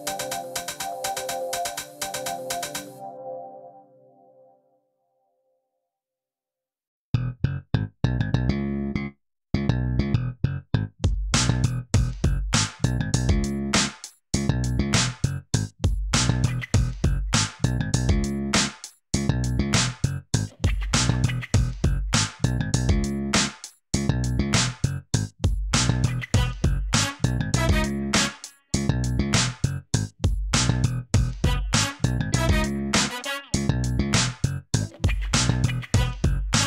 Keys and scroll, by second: 1.5 ., 2.8 i, 3.9 e, 7.8 i, 8.7 i, 10.1-10.4 typing, 10.6 Return, 11.9 3, 12.4 Return, 14.8 ., 14.9 1, 15.0 Return, 19.1 Tab, 20.2 Tab, 20.6 2, 21.7 ctrl+b, 24.0 Escape, 24.5 ctrl+b, 26.7 Tab, 30.1 Tab, 30.7 3, 31.2 shift+s.